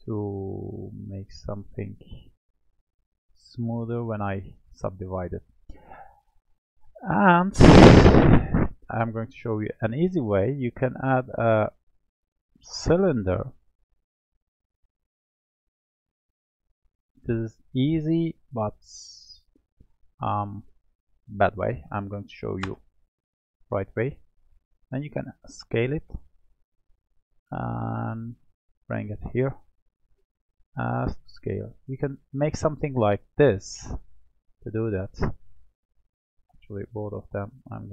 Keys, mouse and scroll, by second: 3.6-6.6 middle drag, 8.7-13.3 drag, 13.3-13.9 scroll down 1, 13.9-15.9 middle drag, 15.9-17.2 drag, 20.3-23.3 drag, 24.7 s, 27.6-28.7 drag, 30.5 s, 32.7-34.1 middle drag, 34.1 click, 35.5 shift+click.